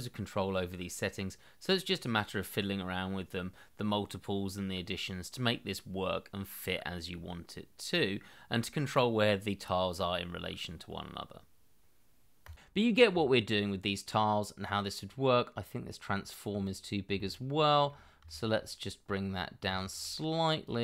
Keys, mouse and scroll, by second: 13.0 middle click, 17.1 shift+middle click, 18.6-19.3 scroll up 1, 19.7 shift+middle click.